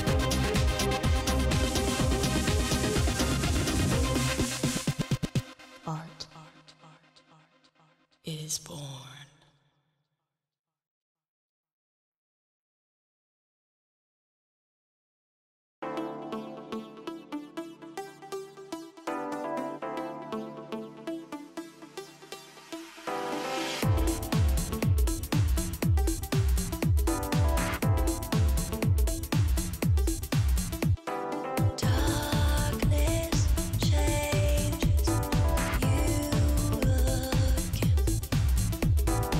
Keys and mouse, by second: 0.0 KP_Decimal, 0.1 KP_Decimal, 1.3 z, 2.6 click, 2.6 right click, 3.7 ctrl+Tab, 4.0 ctrl+Tab, 4.2 right click, 4.5 right click, 5.4 click, 6.1 right click, 6.3 KP_Decimal, 6.4 KP_Decimal, 7.4 z, 8.1 right click, 8.7-9.8 drag, 9.3 g, 9.8 g, 10.6 KP_7, 11.4 g, 12.7 right click, 14.2-17.1 middle drag, 14.7-17.1 right drag, 15.1 click, 15.8 click, 16.3-17.4 drag, 17.4-18.7 right drag, 17.6-18.7 drag, 18.8-20.1 right drag, 19.4 click, 19.4 middle click, 20.4-22.0 right drag, 20.7-21.8 drag, 21.8 z, 23.7-25.6 drag, 24.9 right click, 27.5 KP_7, 27.5 KP_7, 30.2 click, 30.9 KP_7, 32.4 KP_7, 33.4 z, 35.2 right click, 35.8 z, 36.2 z, 37.6 z.